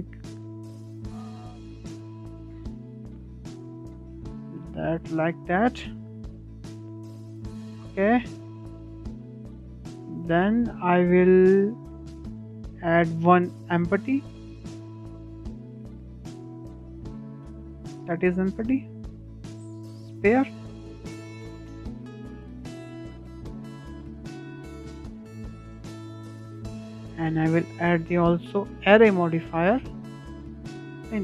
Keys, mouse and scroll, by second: 1.0-1.3 scroll down 2, 1.3-1.7 shift+middle drag, 1.7 scroll up 2, 1.8-3.8 middle drag, 3.8-4.3 scroll down 2, 4.3-5.2 middle drag, 5.2 scroll down 2, 5.5-5.8 middle drag, 5.8-6.1 scroll up 4, 6.1-8.8 shift+middle drag, 8.8-9.2 scroll down 2, 9.2-12.3 shift+middle drag, 12.3 shift+a, 20.4 s, 21.9 click, 23.9 s, 25.6-25.9 scroll down 2, 25.9-26.5 shift+middle drag, 26.5 click, 28.1-31.2 drag.